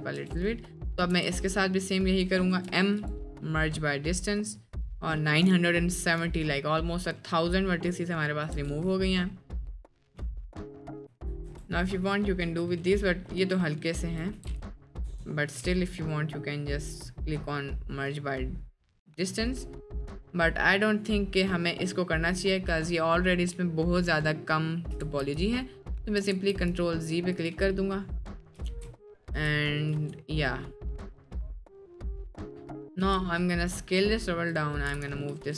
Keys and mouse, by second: 0.5 Tab, 0.9 middle click, 1.2 a, 2.5 m, 6.3 middle click, 7.3 middle click, 8.6 Tab, 9.1 middle drag, 9.7 middle drag, 10.3 middle click, 11.0 click, 11.8 Tab, 12.4 a, 12.8 middle click, 13.4 middle click, 14.0 Tab, 14.6 Tab, 15.0 m, 25.3 ctrl+z, 26.4 ctrl+z, 27.5-28.5 drag, 28.9 ctrl+s, 29.3 space, 31.3-32.0 drag, 31.3 space, 32.2 middle click, 32.8 click, 33.0 s, 34.5 click, 34.9 g.